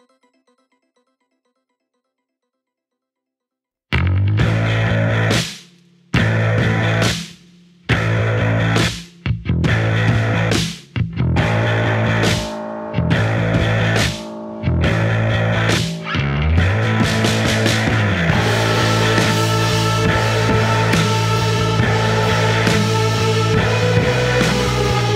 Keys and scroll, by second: 1.2 F1, 2.6 4, 7.7 1, 13.1 9, 13.3 Return, 17.8 ctrl+d, 23.5 ctrl+d.